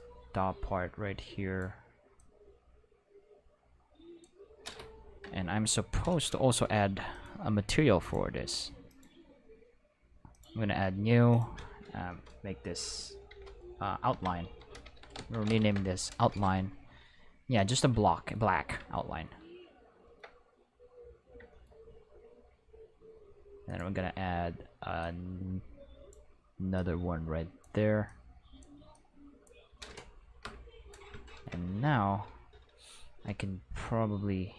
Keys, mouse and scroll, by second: 2.1-4.1 drag, 5.2 Return, 6.0 click, 13.2-15.5 typing, 15.7 Return, 23.6 click, 24.9-26.0 drag, 26.7 click, 28.0 click, 28.9 click, 30.4 Return, 30.7 middle click.